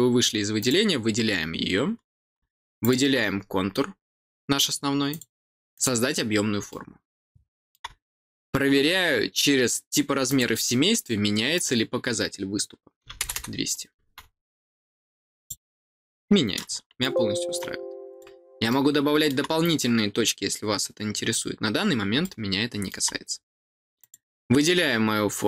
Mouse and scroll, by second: 1.1 middle click, 2.7 click, 5.0 click, 5.7 click, 6.6-7.7 middle drag, 10.2 click, 11.5 click, 15.3 click, 16.9 middle click, 18.0 click, 18.6 middle click, 22.2 middle click, 23.9 click.